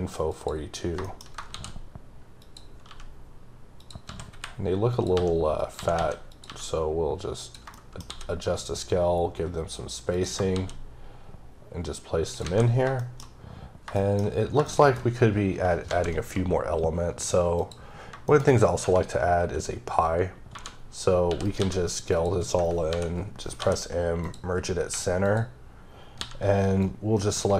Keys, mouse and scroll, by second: 0.3 click, 1.0 shift+middle click, 1.7 d, 2.4 click, 2.9 g, 3.8 click, 4.1 s, 4.9 click, 5.1 g, 5.6 click, 5.8 s, 6.3 click, 6.4 g, 7.4 click, 7.7 shift+middle click, 8.0 shift+d, 10.1 click, 10.5 shift+d, 12.3 click, 12.4 a, 12.8 scroll down 2, 13.0 shift+middle click, 13.6-13.9 scroll up 1, 14.0 shift+middle click, 14.7 shift+double middle click, 15.9 shift+a, 17.6 click, 18.3 shift+middle click, 18.5-18.8 scroll up 1, 21.4 right click, 21.6 s, 22.1 click, 24.2 click, 24.9 3, 25.2 click, 26.2 c, 26.5-26.8 scroll down 3, 26.8 click, 27.4 ⊘.